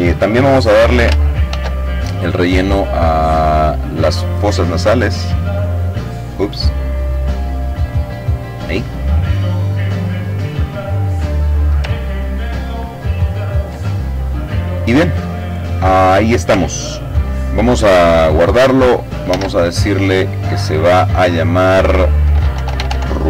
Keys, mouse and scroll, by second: 1.0 click, 2.6 click, 3.3 click, 5.2 click, 6.3 click, 7.5 click, 8.7-9.9 drag, 10.7-11.3 ctrl+scroll up 2, 11.3-12.1 ctrl+scroll down 2, 12.1 ctrl+middle click, 12.5 click, 13.3 click, 17.6 ctrl+s, 20.6-23.2 typing.